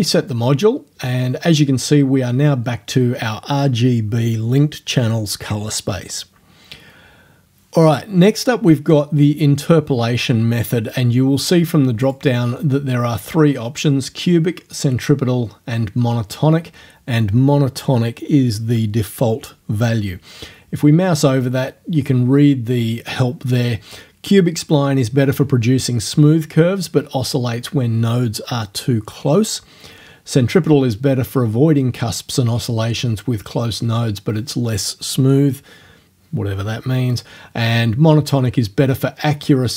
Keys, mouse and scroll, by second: 0.0 click, 12.1 click.